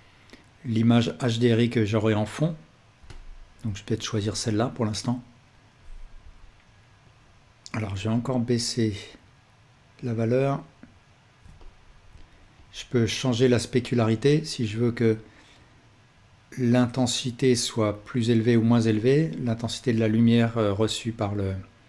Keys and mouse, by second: 11.6-21.8 ctrl+alt+drag.